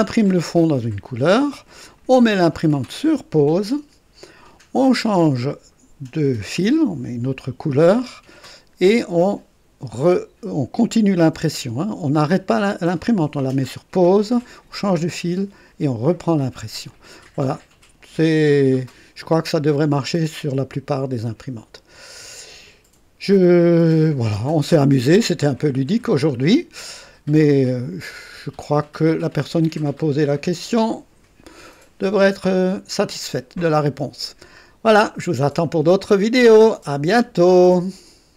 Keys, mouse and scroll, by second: 0.5-2.1 drag, 16.8-22.1 drag, 25.1 scroll up 1, 26.1 scroll down 1, 27.6-31.4 drag, 31.7 right click, 37.4 right click, 38.3 click.